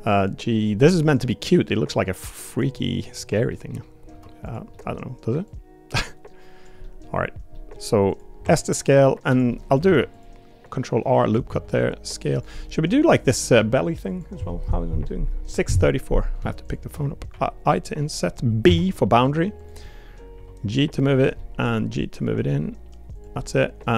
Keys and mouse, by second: 0.2 click, 0.8 middle click, 1.7 click, 2.8 middle click, 3.5 middle click, 4.4 click, 4.7 middle click, 5.5-6.6 drag, 6.8 middle click, 7.5 middle click, 8.1 click, 8.4 s, 9.5 middle click, 9.8 ctrl+r, 11.5 s, 12.5 middle click, 13.0 click, 13.6 3, 19.8 middle click, 20.3 g, 21.4 middle click, 21.7 g, 23.4 middle click.